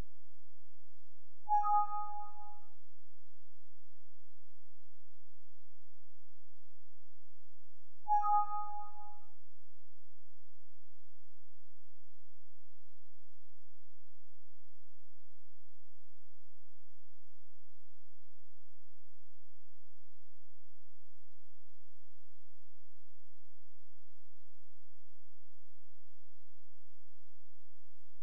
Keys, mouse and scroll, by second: 5.1 click, 7.9 click, 11.1 click, 14.7 shift+click, 18.1 ctrl+z, 19.6-19.9 scroll up 1, 20.5 shift+click, 23.5-24.0 scroll down 1, 24.3-25.1 scroll up 1, 25.1 click, 26.4 ctrl+z, 27.9 click.